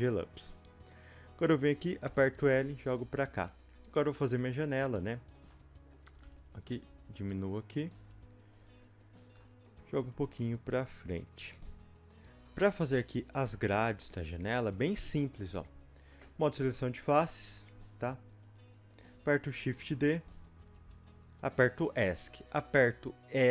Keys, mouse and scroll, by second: 0.6-2.0 scroll down 1, 2.0 l, 4.9 click, 5.1 shift+middle click, 6.2 g, 9.4 middle click, 9.8 scroll up 1, 9.9 g, 12.4 middle click, 13.2 click, 13.5 middle click, 14.0-14.5 scroll up 2, 14.5 shift+middle click, 15.1 scroll up 2, 15.1-17.4 middle drag, 17.4 3, 18.5-19.6 drag, 19.6 shift+d, 20.9 Escape, 21.3-22.7 scroll down 2, 22.7-23.5 scroll down 1.